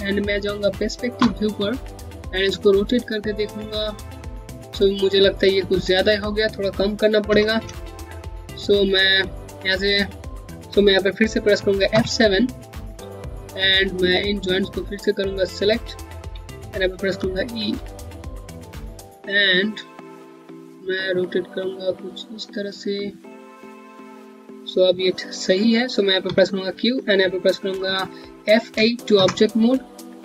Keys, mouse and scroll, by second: 0.2 space, 6.9 z, 7.6 scroll down 1, 7.8 alt+click, 11.6 middle click, 12.6 scroll up 1, 13.4 scroll down 1, 14.4 click, 15.9 q, 17.6 alt+middle click, 18.1 scroll up 1, 18.6 click, 18.8 Home, 21.0 click, 26.0 q, 28.4 q, 30.0 5.